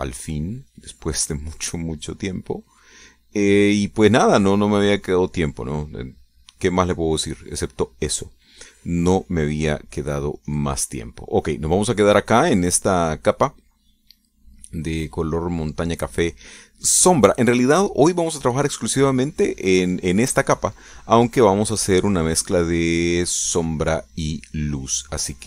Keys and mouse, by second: 0.8 click, 1.1 click, 2.0 click, 2.4 click, 3.0 click, 3.6 click, 4.6 click, 6.2 click, 6.5 click, 7.2 click, 7.7 click, 9.1 click, 10.4-11.9 drag, 18.9-20.1 drag, 20.2 click, 23.0 click, 24.0 click, 24.7 click.